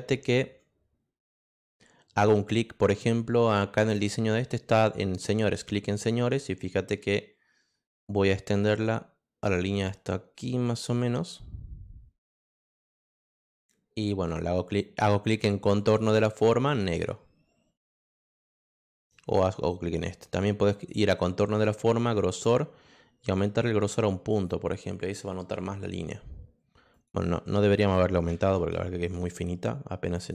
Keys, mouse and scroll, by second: 5.2-8.2 drag, 10.0-12.8 drag, 15.7 click, 16.7 click, 19.2 click, 20.7 click, 23.7 click, 24.3 click, 26.9 click, 28.6 ctrl+z, 29.0 click, 30.1 click.